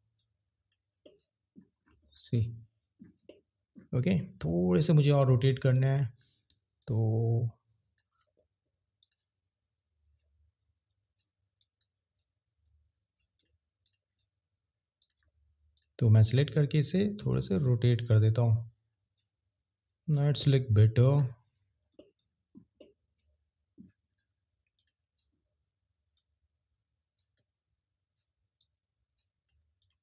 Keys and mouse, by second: 5.7 click, 11.6 shift+click, 17.3 click, 24.8 click, 26.1 click, 28.6 click.